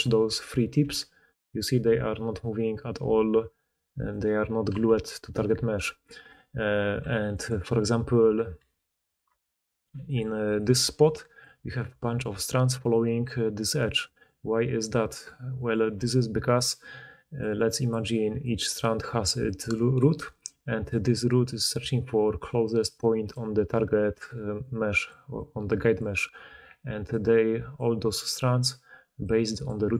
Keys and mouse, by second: 0.1 d, 0.7 g, 4.8 g, 5.5-6.5 d, 5.6 middle click, 5.6 right click, 6.9 g, 8.5 g, 9.2 Tab, 9.7-13.7 typing, 10.9-11.9 drag, 10.9-11.9 middle drag, 10.9-11.9 right drag, 15.9 Tab, 16.7 d, 17.1 d, 17.2-20.1 d, 21.7-29.9 typing, 25.3 click, 25.3 middle click, 25.3 right click.